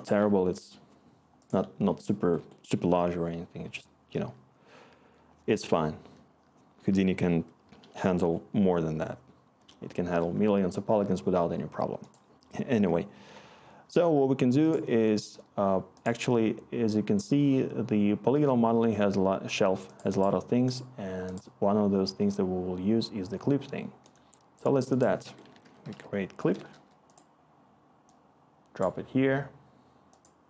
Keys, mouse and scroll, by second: 25.2 Tab, 25.3-26.4 typing, 26.7 Return.